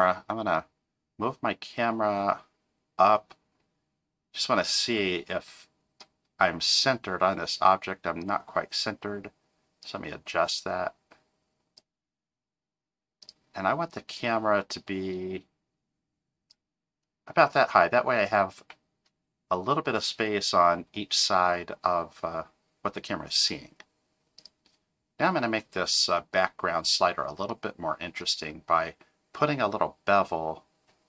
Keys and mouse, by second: 0.6 click, 8.2 click, 9.8-11.8 drag, 13.2 click, 14.1-16.6 drag, 27.5 middle click.